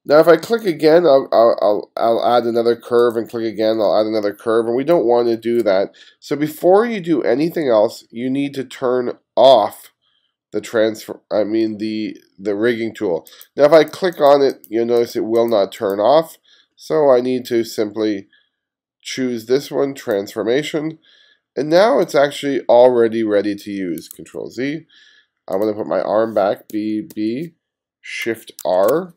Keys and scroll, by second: 5.0 super+z, 24.2 super+z, 26.8 b, 28.7 shift+r.